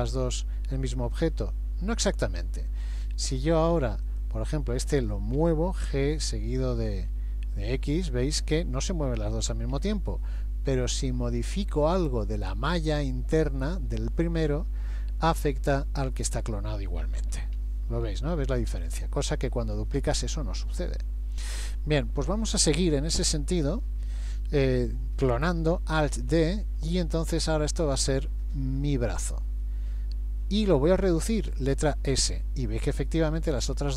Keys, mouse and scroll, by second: 1.0 Escape, 3.1 Tab, 4.1 click, 5.4 g, 11.0 middle click, 17.6 KP_1, 18.1 KP_3, 19.3-19.9 scroll down 2, 19.8 shift+middle click, 26.2 alt+d, 31.9 s.